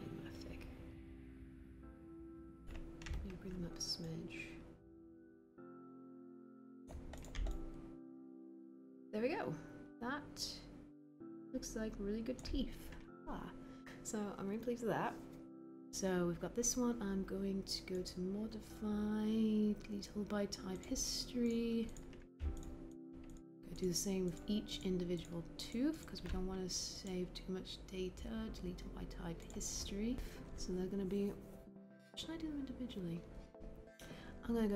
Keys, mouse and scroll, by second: 3.1 w.